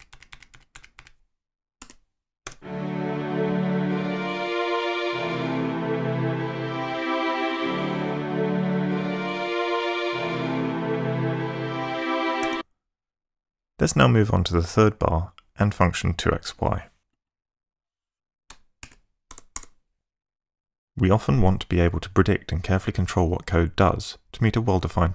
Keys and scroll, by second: 1.8 4, 2.5 space, 12.4 space, 19.3 ctrl+shift+Tab.